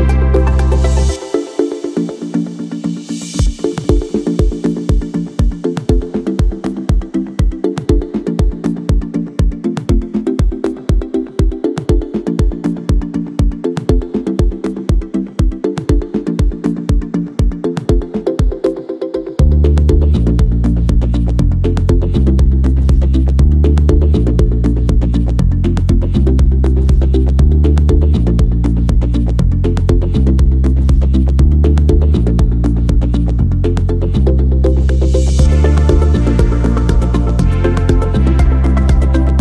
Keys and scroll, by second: 2.0 m, 7.1 ctrl+c, 14.8 s, 18.4 m, 23.7 s, 27.1 v, 31.3 m, 36.0 s.